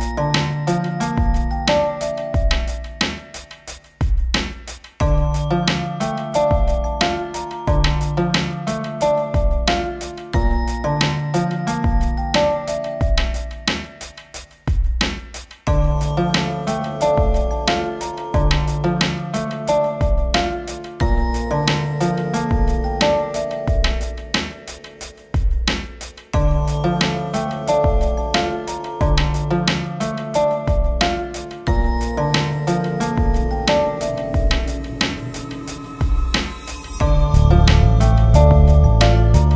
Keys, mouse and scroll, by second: 3.2 ctrl+space, 4.1 shift+Page_Down, 4.8 a, 5.2 click, 9.3 click, 10.3 right click, 11.3 click, 12.3-15.5 alt+drag, 15.5 click, 17.7 scroll up 1, 18.5-20.4 drag, 20.4 right click, 21.8 click, 23.9 shift+Page_Down, 24.3 ctrl+Page_Up, 29.6-30.1 scroll up 1, 30.1 click, 30.4 scroll up 1, 33.2 scroll up 1, 34.1-35.7 drag, 35.7 scroll down 1, 38.6-39.5 drag.